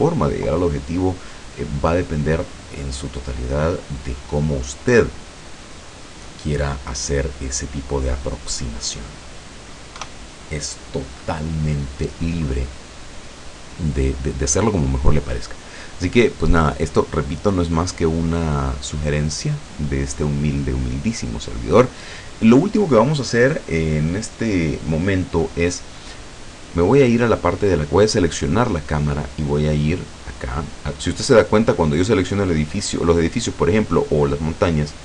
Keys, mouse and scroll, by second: 3.3-4.5 middle drag, 4.7 scroll down 2, 5.1-9.3 middle drag, 10.0 KP_0, 28.5 right click.